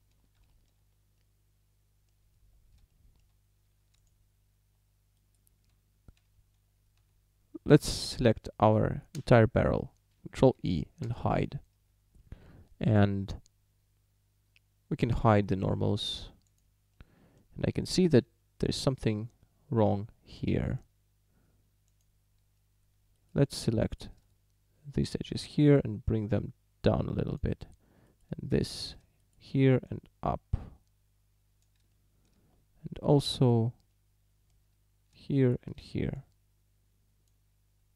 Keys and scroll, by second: 5.7 Tab, 7.0 a, 9.2 l, 10.4 ctrl+i, 11.1 h.